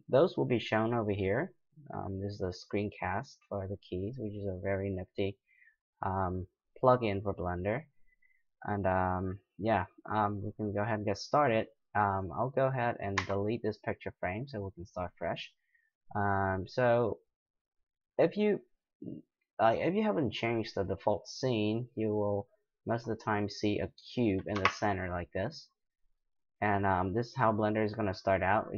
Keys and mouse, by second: 8.6-10.5 middle drag, 12.2 right click, 13.2 x, 23.3-24.7 drag, 24.5 KP_Decimal, 25.7-28.7 middle drag.